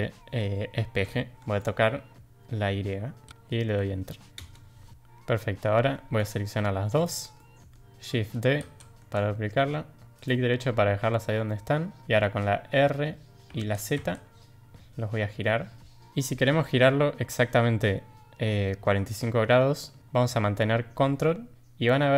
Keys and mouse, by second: 1.3 ctrl+z, 1.3 ctrl+m, 4.9-5.6 middle drag, 6.9 shift+click, 7.3-7.7 middle drag, 8.6 shift+d, 11.4 middle drag, 12.0 shift+click, 13.4 r.